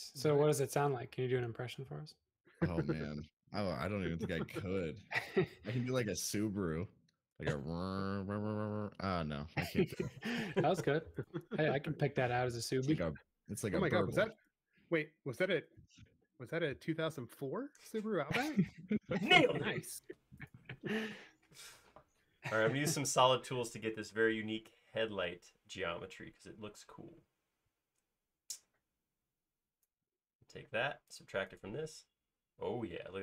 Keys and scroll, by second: 3.4 space, 6.7 l, 11.9 e, 12.2 space, 12.6 e, 13.6 space, 32.3 space.